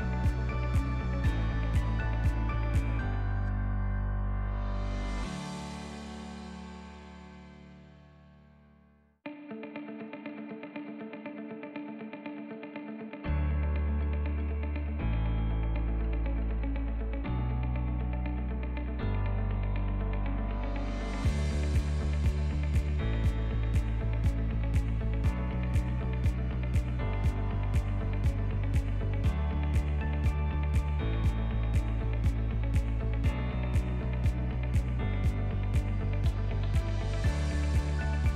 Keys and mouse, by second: 4.3-7.5 drag, 7.5 middle click, 9.2-13.0 drag, 14.6-20.1 drag, 18.3 BackSpace, 26.6 click, 28.2-33.1 drag, 34.0 click, 35.3 click, 37.9 click.